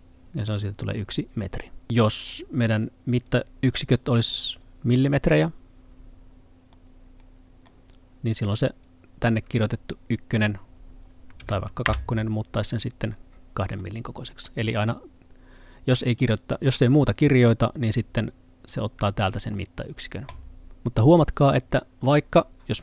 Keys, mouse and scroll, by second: 0.9 scroll up 1, 2.2 click, 6.7 middle click, 8.7 click, 11.4 2, 11.9 Return, 13.8 middle click, 20.3 click, 20.8 middle click.